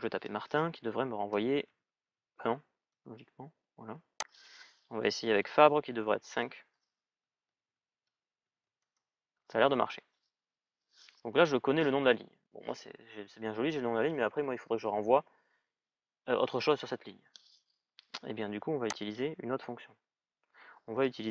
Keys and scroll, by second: 0.5-2.3 typing, 2.5 Return, 7.0-8.9 typing.